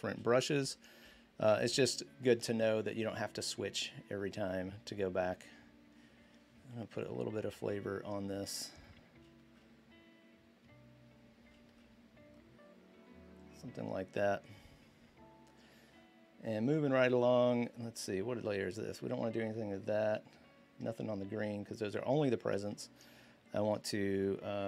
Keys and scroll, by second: 0.0-0.8 typing, 2.8-3.6 typing, 6.6 typing.